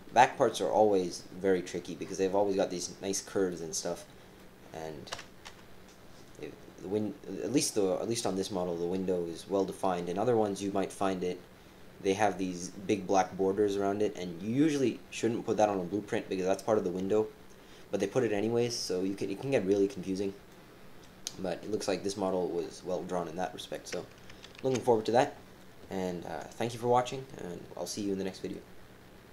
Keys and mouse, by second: 4.4 click, 5.1 KP_4, 5.5 KP_4, 5.5 KP_7, 20.5 click, 21.2 click, 24.6 ctrl+s.